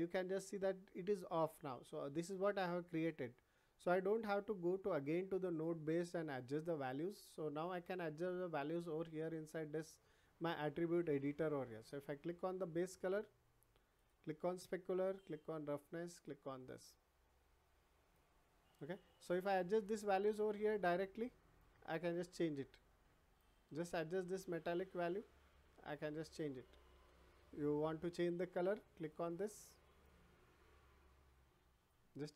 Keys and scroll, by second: 26.9 ctrl+z.